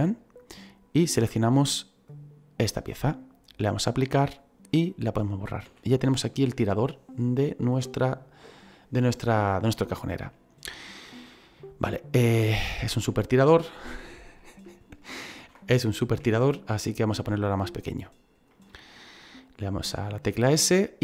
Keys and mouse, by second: 0.9 click, 2.0 click, 3.9 click, 4.6 right click, 5.6 Delete, 6.1 middle click, 12.2 middle click, 13.2 right click, 14.3 click, 15.3 ctrl+z, 16.4 click, 18.4 middle click, 20.3 s.